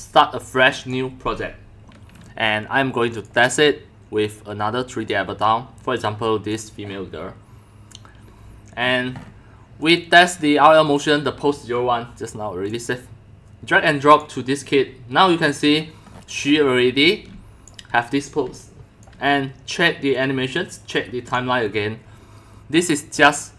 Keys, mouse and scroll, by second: 0.8 click, 3.1 click, 5.1 click, 8.8 scroll up 6, 9.0 scroll, 9.1-9.5 scroll up 5, 9.5 scroll, 9.9 scroll up 1, 10.0 click, 12.7-14.2 drag, 15.7 click, 16.0 click, 16.1-17.2 middle drag, 16.7-19.1 typing, 17.2 scroll up 1, 17.4 scroll, 17.6 scroll up 1, 17.7 click, 19.1 click, 21.3 click, 21.6 drag, 22.7 click.